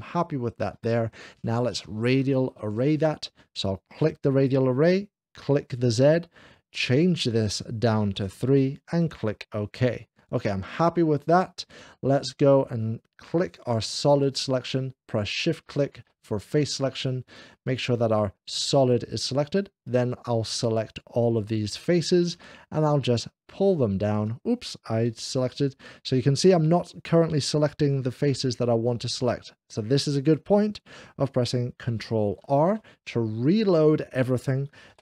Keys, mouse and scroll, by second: 4.2 click, 5.4 click, 6.7 click, 8.1 3, 9.0 click, 13.3 click, 15.5 shift+click, 17.1 click, 18.5 click, 19.7 shift+click, 21.0 shift+click, 22.2 shift+click, 22.9 shift+click, 25.2 ctrl+z, 29.1 click, 32.5 ctrl+r.